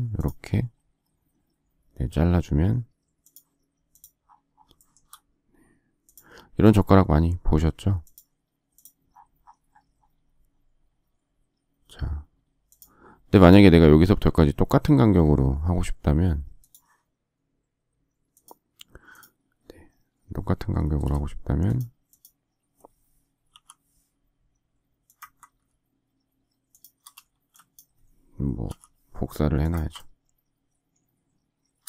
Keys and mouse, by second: 8.9 click, 13.4 click, 19.3 click, 20.8 space, 21.7 click, 23.4 m, 27.2 shift+space, 28.6 m.